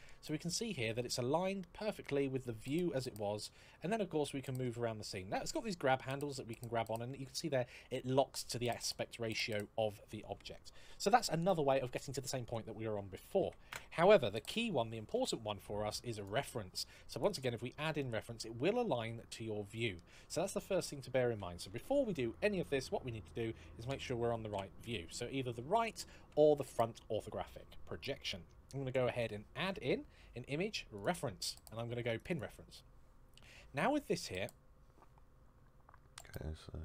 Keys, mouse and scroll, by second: 2.9 middle click, 5.4 click, 13.4 x, 13.5 Return, 14.9 shift+a, 16.0 click, 17.0 click, 17.8 middle click, 21.5 ctrl+z, 24.3 KP_1, 24.3 KP_3, 25.6 KP_3, 26.0 KP_1, 30.8 click, 30.8 shift+a, 32.0 click, 33.3 scroll up 1.